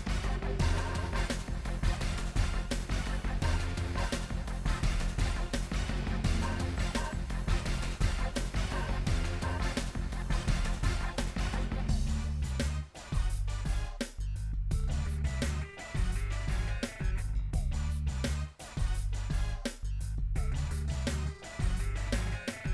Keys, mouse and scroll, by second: 0.0 n, 0.5 shift+click, 1.0 f, 1.1 shift+click, 1.4 f, 2.2-3.4 shift+drag, 3.5 shift+click, 3.6 middle click, 3.9 scroll up 1, 4.0 shift+middle click, 4.9 g, 6.1-8.0 middle drag, 8.0 ctrl+z, 9.0 click, 9.7 shift+click, 10.2 shift+click, 10.7 middle click, 11.0 KP_1, 11.6 g, 12.7 middle click, 12.8-13.2 scroll down 2, 13.2 shift+middle click, 13.5 ctrl+z, 13.7 shift+click, 13.9 g, 15.6 middle click, 15.8 scroll down 2, 16.0 middle click, 16.8 click, 17.1 g, 17.8 middle click, 18.6 scroll up 1, 19.0 middle click, 19.7 scroll down 1, 19.8 middle click, 20.5 scroll down 1, 20.6-22.7 middle drag.